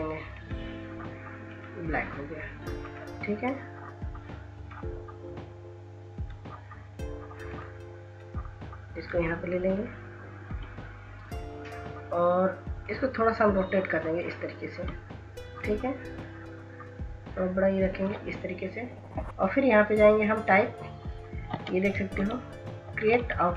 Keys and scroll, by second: 23.1 ctrl+s.